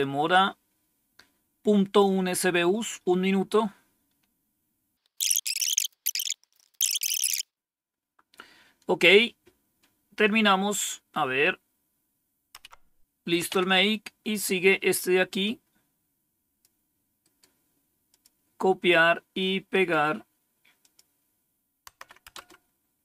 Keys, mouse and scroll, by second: 6.3 scroll down 1, 6.9 click, 12.5 Up, 13.3 Down, 15.3-16.5 drag, 17.1 right click, 18.0 click, 19.6 right click, 20.7 click, 20.8 typing, 21.2 click, 21.8 Right, 22.2 Return.